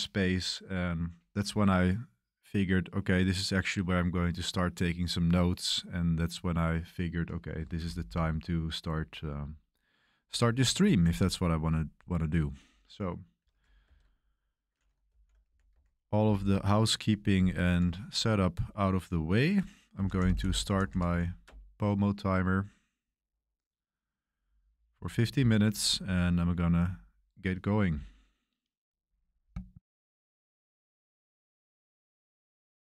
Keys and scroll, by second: 13.9 super+3, 14.9-16.2 typing, 19.7-21.6 typing.